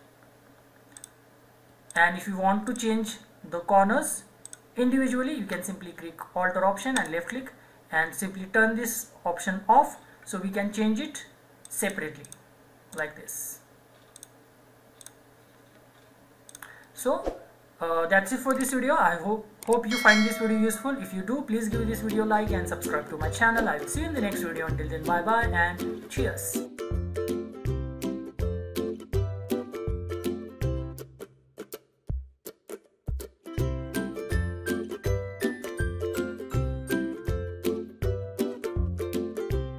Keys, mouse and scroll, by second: 1.0 alt+click, 7.1 alt+click, 11.6 click, 14.2 click.